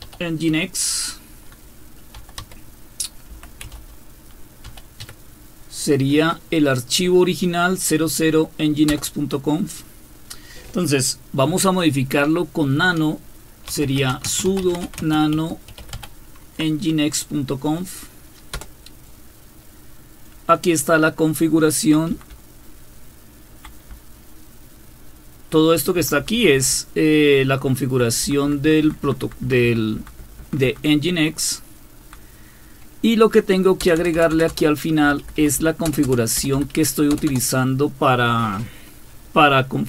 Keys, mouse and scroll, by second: 0.0-0.5 typing, 1.9-5.0 typing, 8.9 Return, 13.5-16.4 typing, 18.5 Return, 21.7 Down, 22.1 typing, 23.0-23.6 Down, 23.9-25.7 Down, 26.0 Down, 26.5 Down, 26.7-28.0 Down, 28.6 Down, 28.8 Down, 29.0 Down, 29.2 Down, 29.4 Down, 29.8 Down, 30.0 Down, 30.2 Down, 30.6 Down, 30.6 Down, 31.3-32.1 Down, 32.3 Down, 33.8 Return, 34.0 Return, 34.1 Return, 34.3 Return, 34.5 Return, 35.0 Up, 35.2 Up, 35.4 Up, 35.6 Up, 35.9 Return, 36.0 Return, 36.4 Up, 36.5 Up, 37.1 Return, 37.3 Return.